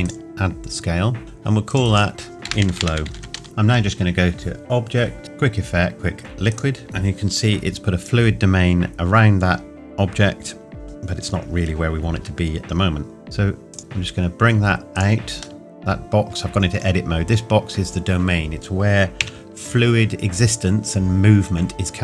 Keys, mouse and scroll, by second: 0.1 click, 3.4 Return, 6.5 click, 12.2 Tab, 13.2 shift+click, 13.8 g, 13.8 x, 15.0 click, 15.6 middle click, 19.2 KP_1.